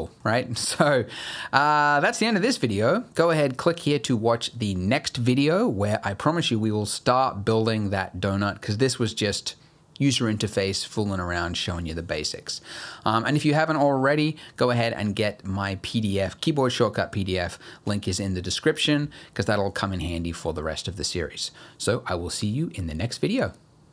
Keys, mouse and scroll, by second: 0.0 middle click, 0.3-0.8 scroll down 2, 0.8 middle click.